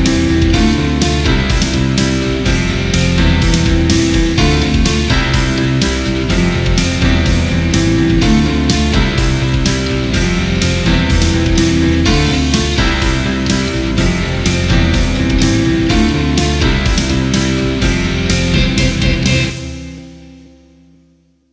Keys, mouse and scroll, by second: 0.4 click, 1.3 ctrl+z, 2.0 click, 2.5 ctrl+z, 2.8 click, 3.3 ctrl+z, 3.4 click, 4.7 ctrl+z, 5.0 click, 5.4 ctrl+z, 5.5 click, 6.2 click, 6.5 ctrl+z, 6.6 click, 7.7 ctrl+z, 7.9 click, 9.0 ctrl+z, 9.6 click, 10.0 ctrl+z, 10.2 click, 11.0 click, 11.5 ctrl+z, 11.9 click, 12.2 ctrl+z, 12.3 click, 12.9 ctrl+z, 13.1 click, 14.4 ctrl+z, 14.5 click, 14.7 ctrl+z, 15.4 click, 15.6 ctrl+z, 15.7 click, 16.0 ctrl+z, 16.1 click, 16.6 ctrl+z, 16.8 click, 17.1 ctrl+z, 17.3 click, 17.5 ctrl+z, 17.7 click, 18.1 [, 18.3 click, 18.5 ctrl+z, 18.7 click, 19.5 click.